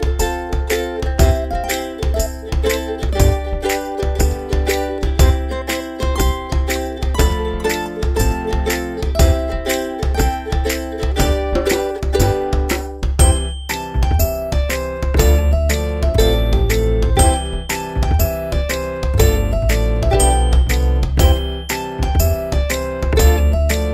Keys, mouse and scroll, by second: 0.2 z, 1.9 click, 3.0 alt+click, 7.4 ctrl+click, 8.7 ctrl+click, 13.2 click, 16.3 click, 19.9 click.